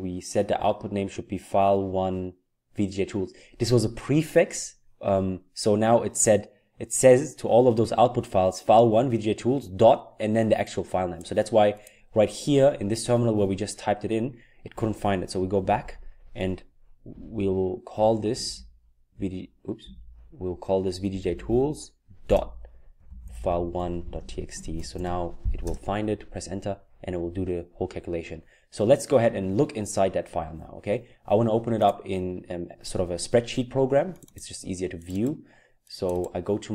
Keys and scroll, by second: 15.7 Up, 17.1 Left, 17.6-17.9 Left, 18.3 Left, 18.5 Left, 19.1 Down, 19.8-25.7 typing.